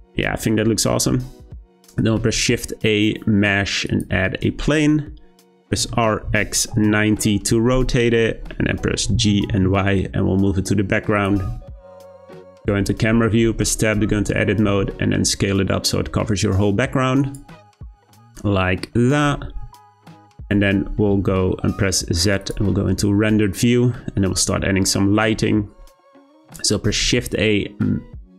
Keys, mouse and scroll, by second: 1.0-2.2 scroll up 1, 2.2 shift+a, 5.7 r, 8.2-8.6 middle drag, 8.6-9.1 scroll down 2, 9.1 g, 11.4 `, 13.3 Tab, 14.6 s, 17.7 Tab, 18.3-20.4 scroll up 1, 20.4 click, 21.1 z, 26.8 shift+a.